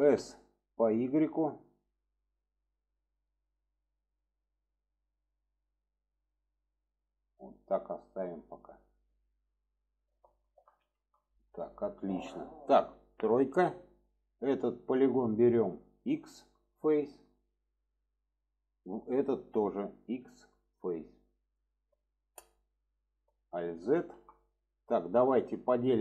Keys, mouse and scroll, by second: 9.2-10.5 middle drag, 10.8 shift+middle click, 11.6 shift+middle click, 12.1-12.6 middle drag, 13.9 middle click, 14.9 click, 17.4-18.0 middle drag, 19.1-21.6 drag, 21.6 alt+middle click, 23.4 alt+z, 24.0 middle click, 24.4-25.0 middle drag.